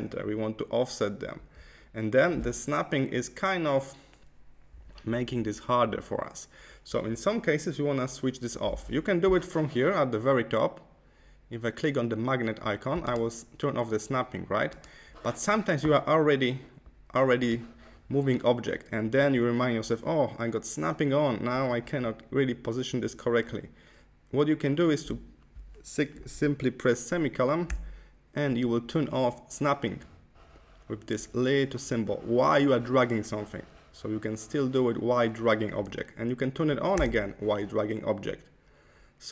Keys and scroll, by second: 27.6 ;, 36.8 ;.